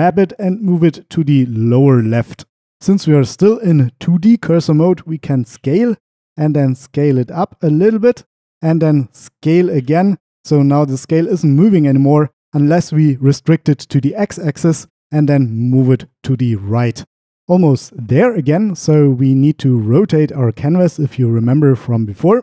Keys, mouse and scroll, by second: 0.0 g, 8.1 click, 14.1 x, 15.9 click.